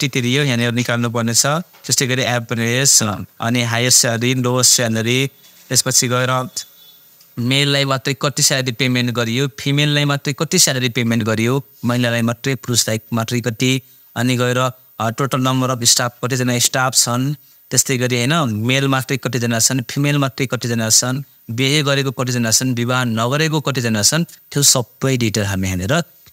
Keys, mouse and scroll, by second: 7.5 click, 14.5 click, 18.9 click, 25.2-26.3 drag.